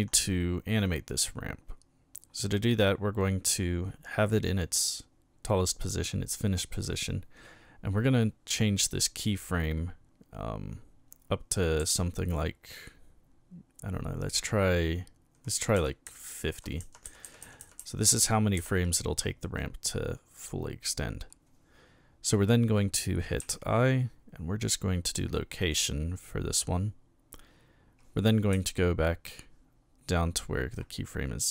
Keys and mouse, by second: 11.8 Right, 15.5 Left, 15.8 Left, 16.8 Left, 17.1 Left, 17.2 Left, 17.4 Left, 17.6 Left, 17.8 Left, 17.9 Left, 18.2 Left, 18.6 Left, 23.4 i, 25.6 click, 28.5 Left.